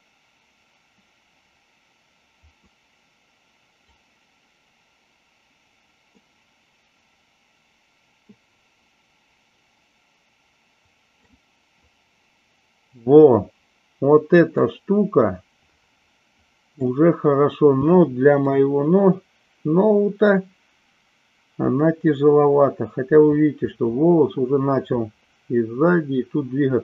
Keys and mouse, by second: 4.4-5.4 middle drag, 8.9-11.6 middle drag, 16.0-19.0 middle drag.